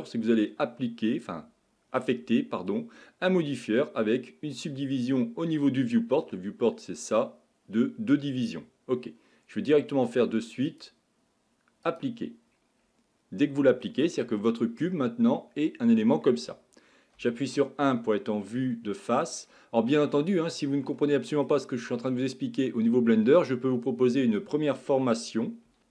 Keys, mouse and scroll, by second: 10.7-12.8 drag, 12.8 scroll up 3, 13.4-14.7 scroll down 2, 14.7 Tab, 14.9-17.2 middle drag, 17.2 KP_1, 18.8-20.0 shift+middle drag, 20.0-20.5 scroll up 1, 20.5-21.0 scroll down 1, 21.0-24.1 shift+middle drag.